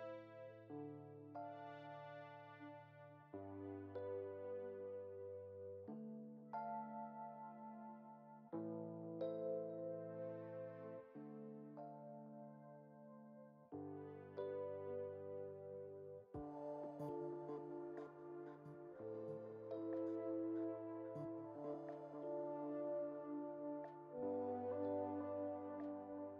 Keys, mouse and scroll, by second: 0.8 ctrl+l, 3.2-3.8 drag, 3.8-6.3 middle drag, 6.3-7.6 drag, 7.6 scroll up 1, 8.1-10.5 drag, 10.5 shift+d, 15.9 click, 18.0-18.8 shift+middle drag, 18.8-21.8 drag, 22.2-23.0 shift+middle drag, 23.0 scroll up 1, 23.4 Tab, 24.3 click.